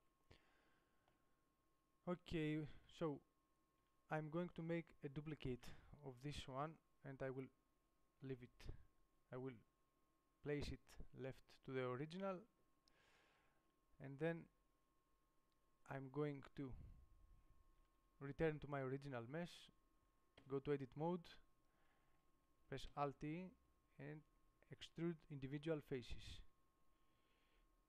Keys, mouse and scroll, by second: 3.2 middle click, 4.0 Tab, 5.7 shift+d, 7.4 middle click, 11.5 middle click, 13.8 Tab, 15.2-17.5 middle drag, 18.0 Tab, 20.6 Tab, 23.2 alt+e.